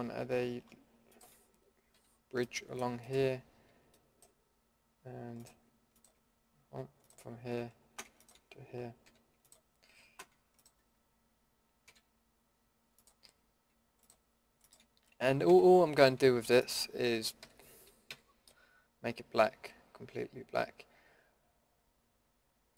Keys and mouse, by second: 1.9 f, 2.1-2.6 middle drag, 9.1 f, 11.8 f, 15.5 f, 17.4 f, 18.1 a.